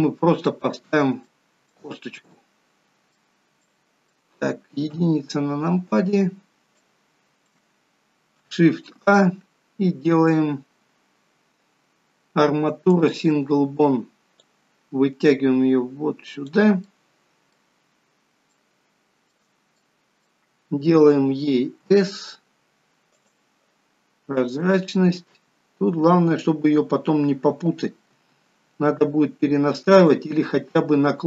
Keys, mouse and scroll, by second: 0.0 middle click, 1.0-1.5 scroll up 4, 1.5 shift+middle click, 2.2-2.6 scroll up 2, 2.6 middle click, 3.7 scroll up 2, 3.9 middle click, 5.2 KP_1, 5.9-6.5 scroll down 5, 6.8 scroll down 3, 7.1 shift+middle click, 8.9 shift+a, 14.7 click, 17.1 middle click, 18.0-18.5 scroll up 5, 18.7 shift+middle click, 20.0 middle click, 21.9 s, 24.6 click.